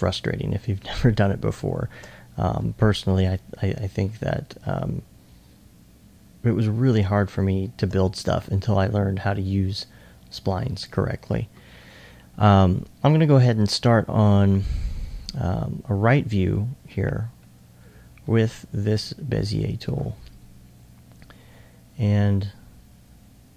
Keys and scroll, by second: 2.3 alt+2, 3.7 alt+2.